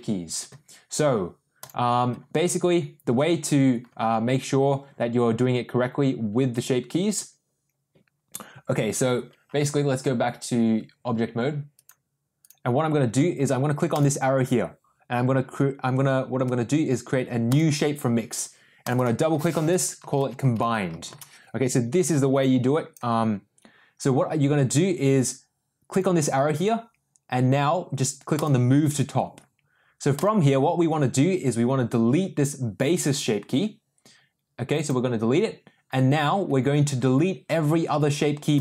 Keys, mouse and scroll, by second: 11.7 click, 14.0-17.7 drag, 18.9-21.7 drag, 22.3 click, 25.9-28.5 drag, 30.2 click, 34.8 click, 38.5 click.